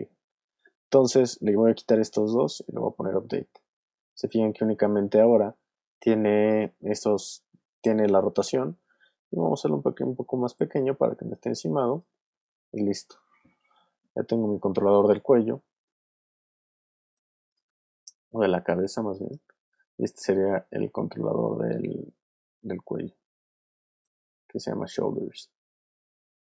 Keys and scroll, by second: 15.3 w, 17.4 super+z, 24.3 super+z.